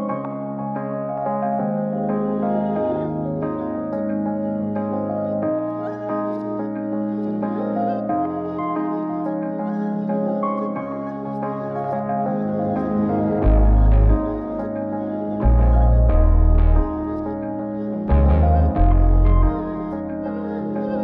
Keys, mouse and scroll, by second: 5.4-6.1 middle drag, 6.7 click, 7.2 n, 9.6 click, 11.8-14.5 drag, 16.2 click, 17.5-18.0 scroll up 3, 18.2 shift+middle drag, 18.6-20.2 middle drag, 20.3 x.